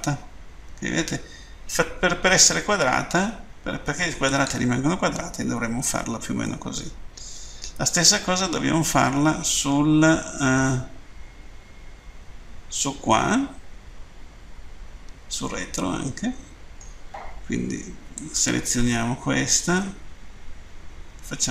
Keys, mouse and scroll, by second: 4.2 click, 6.4 middle click, 18.2 right click.